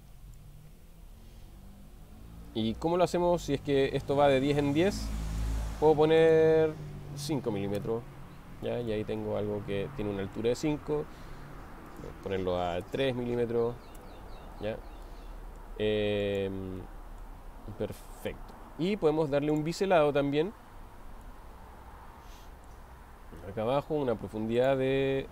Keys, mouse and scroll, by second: 0.5-5.6 drag, 6.2-8.5 drag, 8.9-10.4 middle drag, 12.0-16.5 drag, 14.0 Return, 16.8-17.4 middle drag, 18.1 middle click, 21.6-22.8 middle drag, 24.6-25.3 drag.